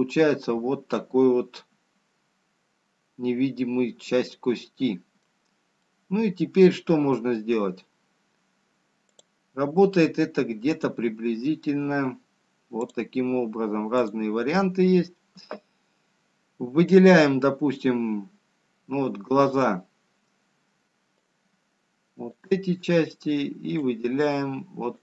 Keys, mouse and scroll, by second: 0.4-1.3 scroll up 4, 1.9 click, 1.9-2.5 scroll down 1, 2.9 middle click, 8.8 middle click, 12.1 click.